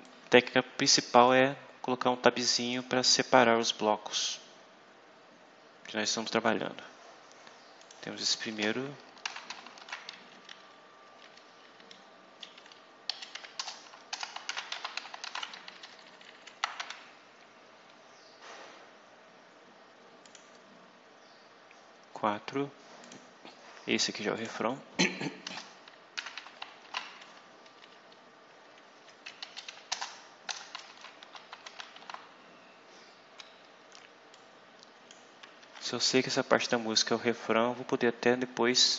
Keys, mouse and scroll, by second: 0.0-2.8 drag, 7.0 scroll down 2, 7.7 click, 8.4 Return, 8.9-10.2 typing, 10.3 shift+Down, 12.3 Up, 12.5 Down, 13.0 Up, 13.3 End, 13.5 Return, 14.0-15.6 typing, 16.8 shift+Tab, 18.1-18.6 scroll down 2, 20.1 click, 22.9 click, 24.3 click, 25.3 Return, 25.8-27.2 typing, 28.9 Down, 29.3 Up, 29.6 End, 29.8 Return, 30.4-32.4 typing, 34.3 click, 35.5 Tab, 36.5 click.